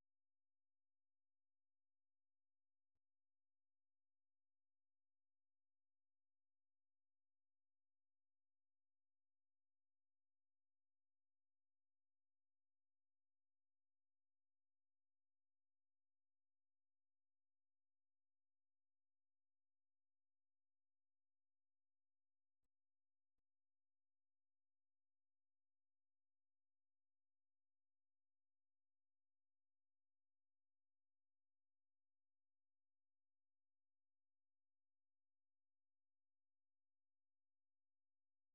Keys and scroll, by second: 0.0-10.9 typing, 15.2 alt+Tab, 16.9-20.0 typing, 35.0 ctrl+c, 37.8 ctrl+c, 38.2 super+1.